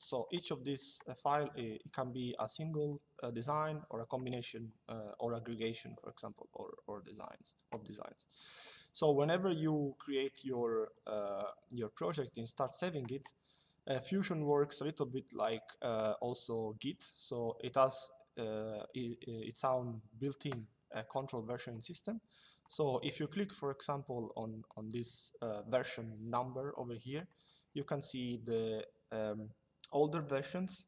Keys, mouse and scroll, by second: 22.3 click.